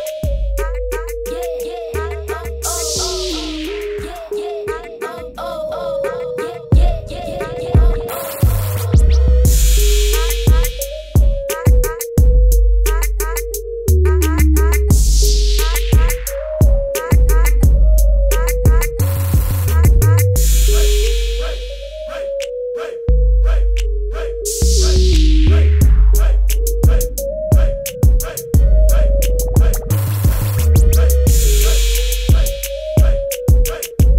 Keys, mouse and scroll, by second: 1.5 click, 3.5 v, 3.7 click, 14.1 click, 15.8 click, 17.6 click, 21.4 b, 22.1 click, 22.9-24.0 typing, 24.2 click, 25.8 x, 25.9 click, 26.8 v, 27.5 v, 27.7 click, 32.3 click, 33.9 b.